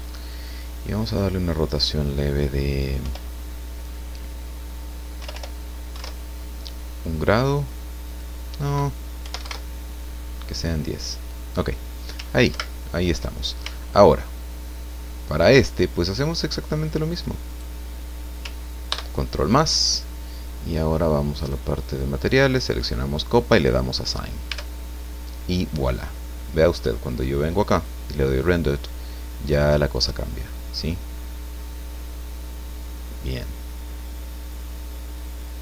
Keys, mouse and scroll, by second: 0.4 click, 1.2 click, 3.1 BackSpace, 5.2 BackSpace, 8.0 click, 9.2 KP_1, 9.3 KP_0, 12.5 ctrl+Right, 14.0-15.6 shift+middle drag, 17.5 right click, 18.9 ctrl+KP_Add, 21.4 click, 22.5 click, 23.5 click, 24.5 Tab, 25.0-26.8 scroll down 1, 26.8 click, 27.0-27.7 scroll down 1, 27.7 click, 28.8 middle click, 29.2-35.6 drag.